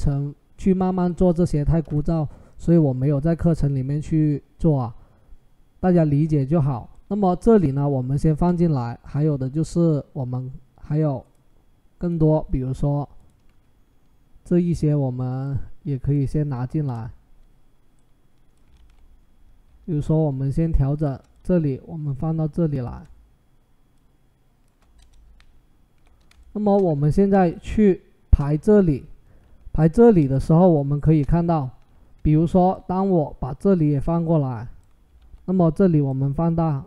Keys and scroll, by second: 16.6 Return, 18.6 ctrl+t, 24.8 Return, 34.9 ctrl+t.